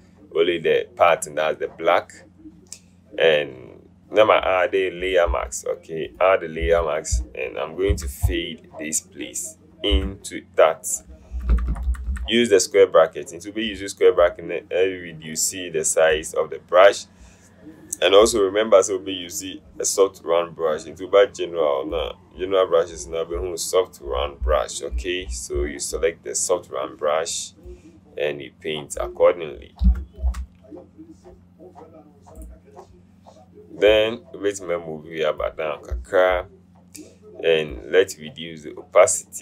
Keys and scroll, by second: 8.0 b, 10.0 Caps_Lock, 11.4-12.2 typing, 29.8-30.9 typing.